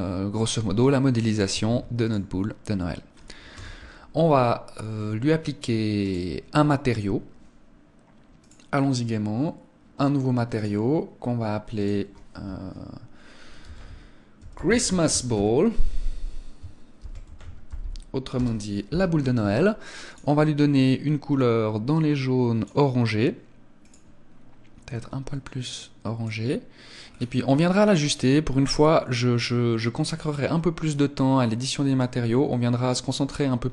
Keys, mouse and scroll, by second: 1.6 ctrl+s, 3.5 KP_0, 4.6-5.1 scroll up 1, 5.1 scroll up 1, 6.0 right click, 8.3 click, 10.5 click, 20.0 click, 23.8 click, 27.0 scroll down 2, 29.2 scroll down 6, 33.6-33.7 scroll down 2.